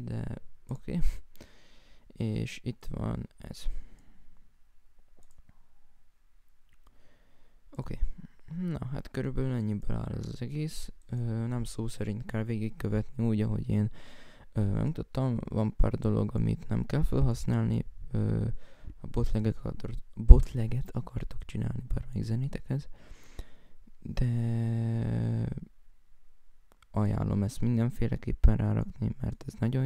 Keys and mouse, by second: 1.4 right click, 5.3 right click, 5.7 right click, 6.9 F1, 18.4 F1, 22.5 right click, 24.9 F1, 29.0 right click, 29.7 F1.